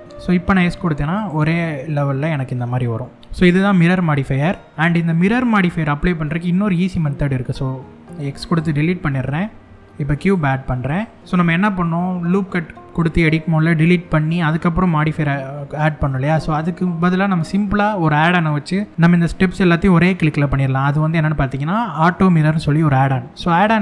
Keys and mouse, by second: 0.0 s, 0.8 click, 1.2-2.6 middle drag, 4.7 Tab, 5.0-6.4 middle drag, 8.7 shift+a, 14.7 click.